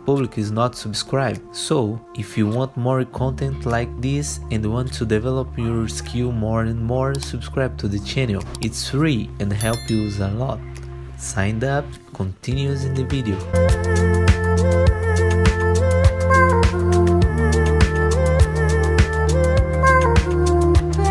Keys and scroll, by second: 0.2 F4, 1.1 F4, 2.6 ctrl+z, 17.7 F4, 19.0 F3, 19.5 ctrl+z.